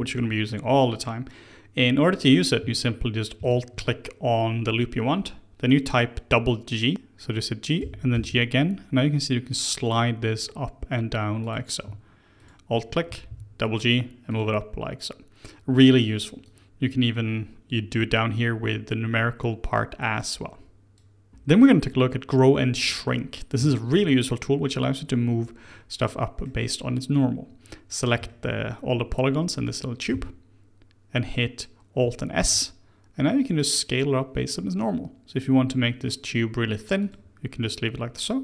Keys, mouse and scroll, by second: 0.1-3.2 shift+middle drag, 3.3 alt+click, 7.8 g, 12.4 alt+click, 13.1 g, 16.4-19.4 drag, 21.3 click, 22.8-27.8 shift+middle drag, 27.8-28.2 scroll up 1, 28.2-30.1 shift+middle drag, 30.1 a, 32.3 alt+s.